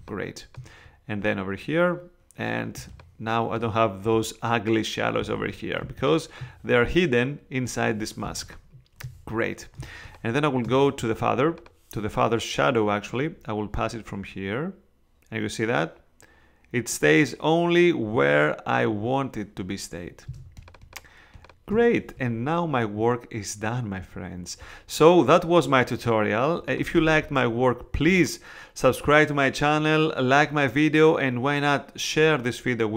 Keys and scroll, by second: 2.7 space, 5.4 super+z, 5.8 super+space, 6.6 space, 8.2 space, 9.8 space, 20.3 space.